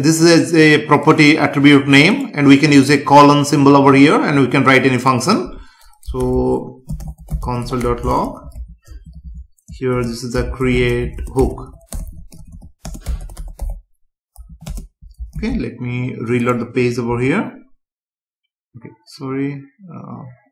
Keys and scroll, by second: 9.0 Left, 11.2 space, 11.9 BackSpace, 12.8 space, 15.3 ctrl+s, 17.0 F5.